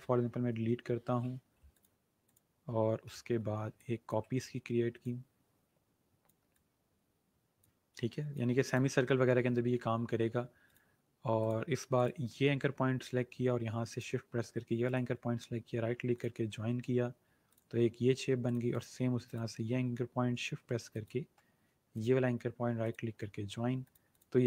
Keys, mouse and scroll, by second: 1.6-7.7 drag, 10.5 click, 13.8 shift+click, 14.7 right click, 16.0 click, 21.9 right click, 22.7 click.